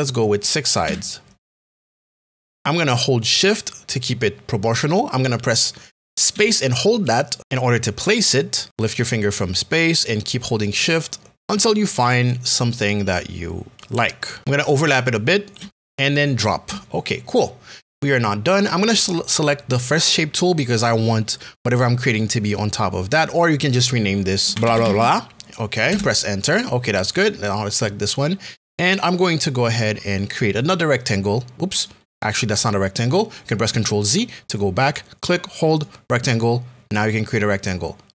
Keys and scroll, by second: 0.8 KP_6, 7.4 space, 14.4 space, 24.3-25.3 typing, 25.9 Return, 34.1 ctrl+z, 34.9 z.